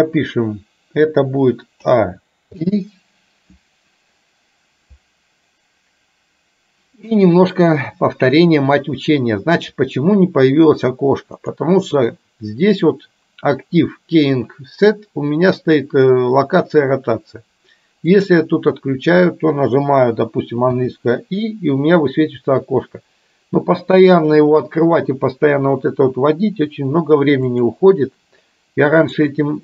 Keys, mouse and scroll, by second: 1.8 a, 2.6 i, 11.6-18.8 drag, 20.7 i, 27.5-29.6 drag.